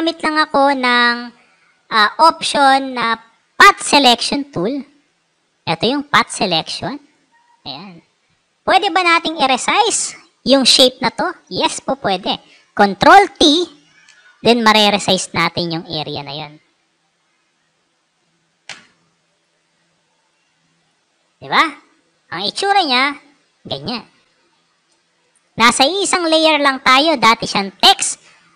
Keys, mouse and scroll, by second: 3.8 click, 5.1 click, 5.6 click, 7.4-9.0 drag, 12.9 ctrl+t, 14.2-15.2 alt+shift+drag, 16.4-17.8 drag, 18.6 Return, 19.2 click, 20.1 click, 20.7 click, 22.3 click, 25.8 click.